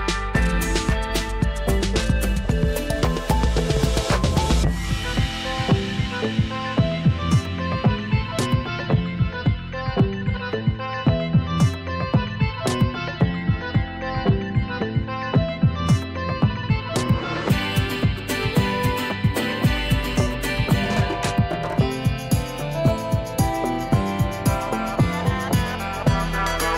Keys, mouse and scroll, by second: 2.8 shift+F5, 5.0 click, 8.5-26.7 drag, 15.3-15.9 click, 18.1-18.8 click, 20.6-21.4 click.